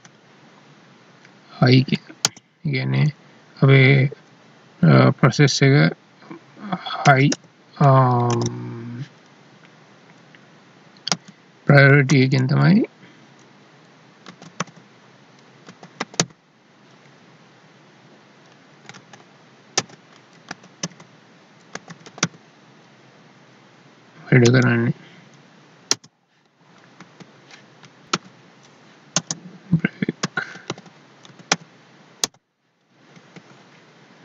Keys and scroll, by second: 11.1 space, 19.0 ctrl+shift+Left, 24.4 Right, 27.0 ctrl+s, 28.1 Tab, 28.2 alt+e, 33.1 ctrl+s.